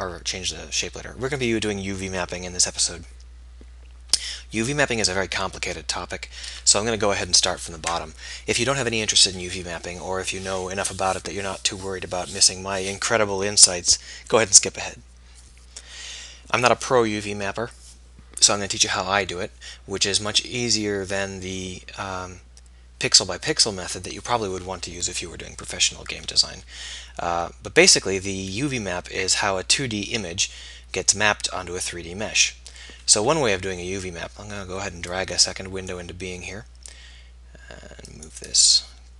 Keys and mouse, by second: 33.3 KP_1.